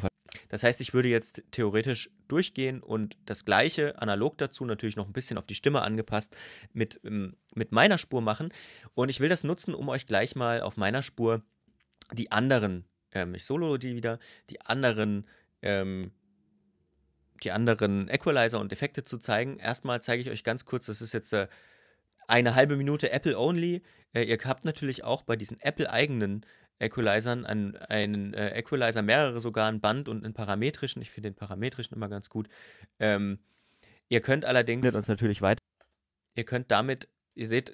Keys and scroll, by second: 34.6 space.